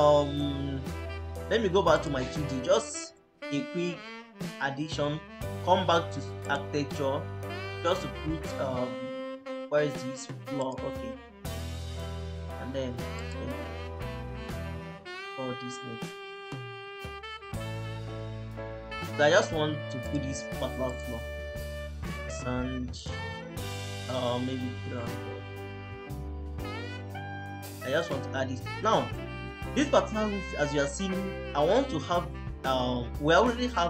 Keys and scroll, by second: 19.4 Escape, 24.4-25.4 typing, 25.7 Return.